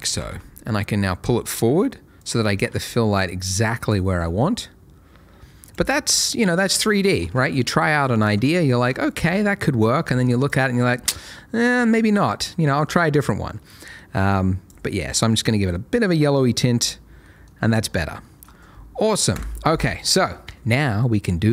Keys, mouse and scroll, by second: 0.1 g, 0.3 y, 2.2 click, 2.5 r, 2.7 z, 3.8 click, 4.1 g, 4.2 middle click, 5.6 click, 7.2 alt+a, 9.0 shift+middle click, 10.4 click, 17.2 middle click, 19.3 KP_0.